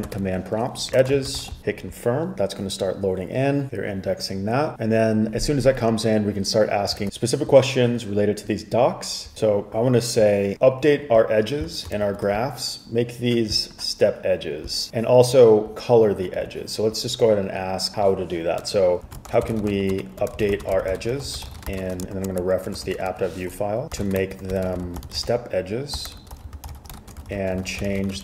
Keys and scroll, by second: 0.1-2.1 typing, 9.3 typing, 12.2 shift+super+], 19.0-28.2 typing.